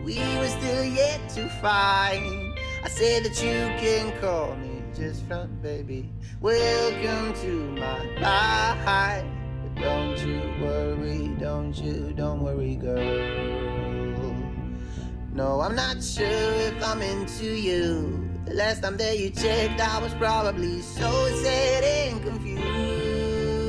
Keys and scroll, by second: 0.5 ctrl+space, 1.4-3.4 typing, 5.9 3, 15.1 ctrl+space, 16.1 t, 16.8 t, 17.5 Up, 18.2 Return.